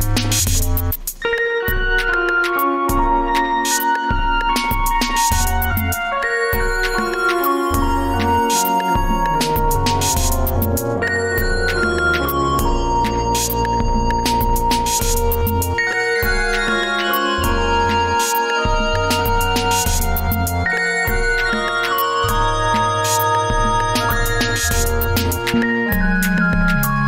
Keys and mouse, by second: 1.8-2.4 middle drag, 3.5-4.9 middle drag, 8.5-10.1 middle drag.